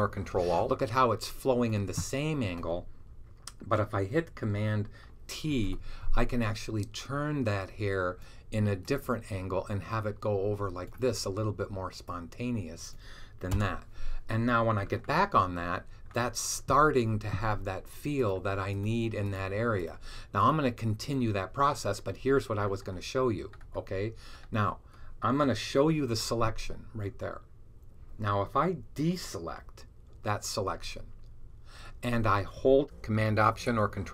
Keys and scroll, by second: 5.4 super+t, 25.9 h, 30.6 super+d.